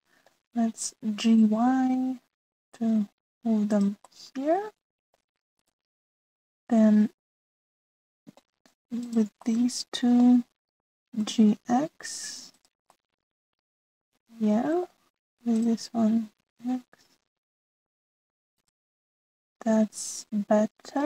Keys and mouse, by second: 0.4 ctrl+z, 0.8 click, 2.1 g, 5.0-6.2 middle drag, 6.6 click, 6.9-9.4 middle drag, 10.0 shift+middle click, 10.4 middle click, 12.1 g, 13.8-15.9 middle drag, 16.5 click, 17.3 g, 19.9-21.0 middle drag.